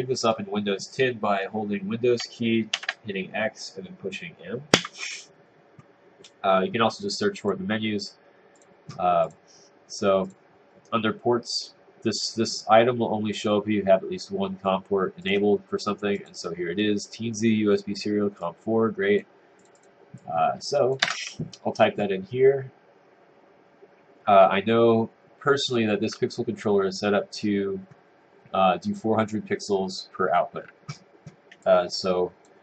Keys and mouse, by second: 21.1 Return.